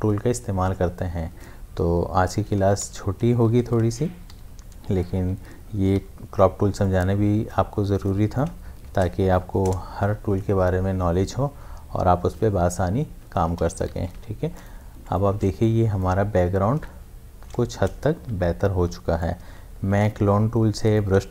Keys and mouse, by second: 2.3-3.3 typing, 4.5-6.0 typing, 6.9-8.9 drag, 8.9 shift+F5, 9.6 Return, 13.2 Return, 13.4 ctrl+d, 13.9 v, 14.2 space, 14.6 ctrl+click, 15.4 ctrl+space, 15.6 click, 15.9 space, 16.3 s, 19.2-21.3 drag.